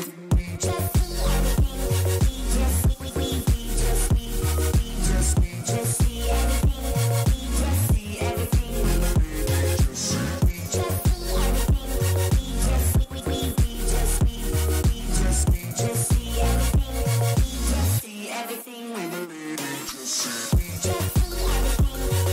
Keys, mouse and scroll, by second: 1.2-3.3 middle drag, 1.2-2.7 right drag, 3.3-5.0 right drag, 4.2-5.2 middle drag, 5.3 middle click, 5.6 middle click, 7.5-10.3 right drag, 8.8-11.5 middle drag, 13.0-14.6 drag.